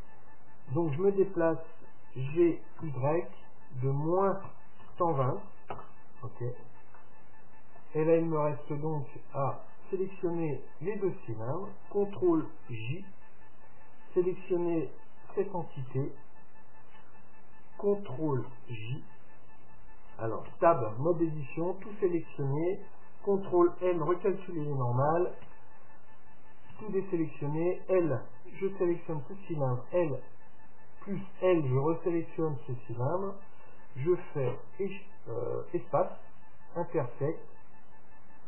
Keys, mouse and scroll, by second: 2.3 g, 7.0-10.4 middle drag, 10.8-12.8 right drag, 12.6 ctrl+j, 15.4-17.3 right drag, 18.5 ctrl+j, 20.5 Tab, 21.6 a, 22.0 a, 23.7 ctrl+n, 25.1 Tab, 25.5 Tab, 26.8 a, 28.6 l, 30.0 l, 34.5 space.